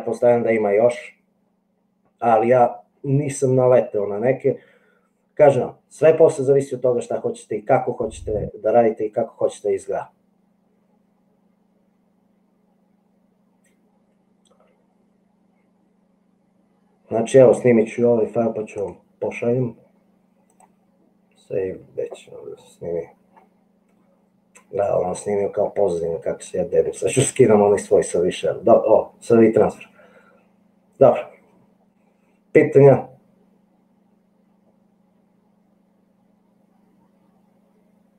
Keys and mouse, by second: 18.9-20.9 drag.